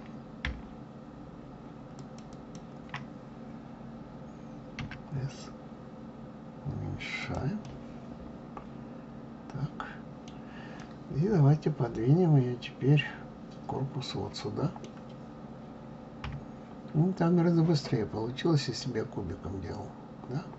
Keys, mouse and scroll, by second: 1.9 shift+click, 2.3 shift+click, 4.8 s, 7.6-10.7 middle drag, 10.8-13.8 middle drag, 16.2 KP_3.